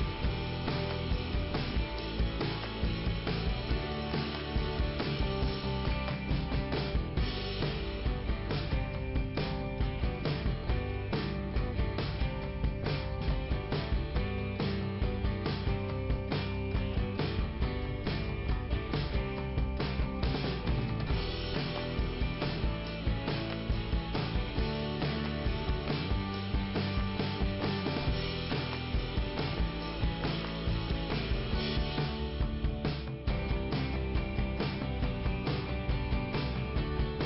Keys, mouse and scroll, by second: 4.2 middle click, 6.2-6.7 scroll up 1, 8.6 click, 11.3 middle click, 13.1 click, 16.6 click, 16.7 click, 16.8 double click, 20.4 click, 22.4-22.9 scroll down 1, 24.9 scroll up 1, 27.6 middle click, 31.3-31.7 scroll down 1, 31.7 middle click, 33.5-34.0 scroll up 1, 34.2 middle click, 35.2 click, 36.4 click.